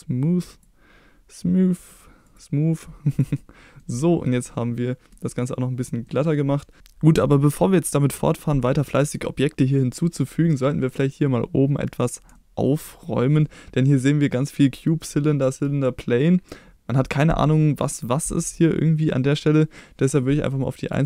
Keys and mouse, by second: 1.8 click, 2.3 click, 3.1 click, 3.4-3.8 middle drag, 4.5-5.1 middle drag, 6.1 middle drag, 12.3-12.7 middle drag, 13.4 middle drag, 20.8 click.